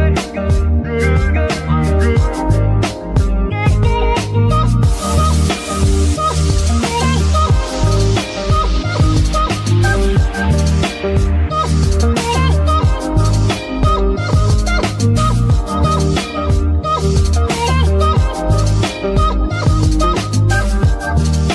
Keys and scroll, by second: 4.9 shift+g, 5.3 Escape, 9.5 g, 10.0 Escape, 14.0 g, 14.3 Escape, 20.0 shift+g, 20.6 shift+Escape.